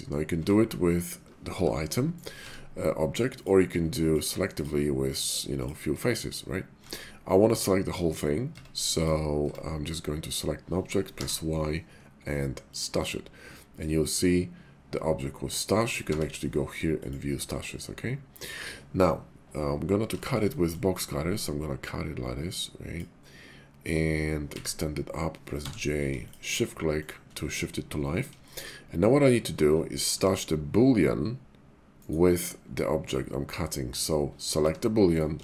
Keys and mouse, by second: 0.3 Tab, 1.5 g, 2.2 click, 2.4 Tab, 3.3 click, 4.0 ctrl+click, 5.5 ctrl+click, 6.8 Tab, 8.4 Tab, 9.4 Tab, 11.1 y, 16.1 y, 18.3 right click, 20.1 shift+middle drag, 20.5 middle click, 21.4-23.2 drag, 24.6 e, 25.6 j, 26.3 shift+click, 27.0 shift+click, 28.5 shift+drag, 30.1 g, 32.0 right click, 34.6 g, 35.1 right click.